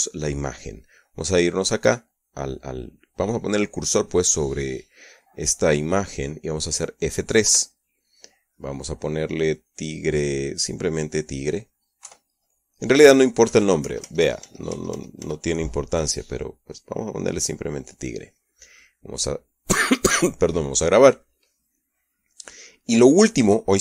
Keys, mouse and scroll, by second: 8.3 F3, 10.4 click, 11.5 click, 12.9 Right, 14.3 BackSpace, 17.3 click, 20.1 click, 21.5 click, 22.8 middle click.